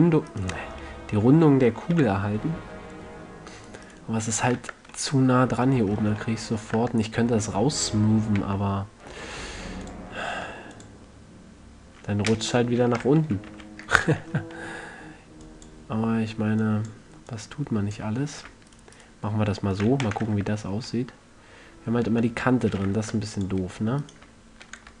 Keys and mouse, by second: 0.0 g, 1.3-1.7 middle drag, 1.7 a, 2.3 z, 4.2-5.5 right drag, 4.9 Tab, 7.1 Tab, 8.7 w, 10.7 w, 13.6 ctrl+z, 13.8 ctrl+z, 15.8-19.4 drag, 19.0-21.5 right drag, 20.2 f, 20.4 a, 20.6 Tab, 21.6 right click, 22.4 Tab, 23.3 ctrl+Tab, 24.4-25.0 drag.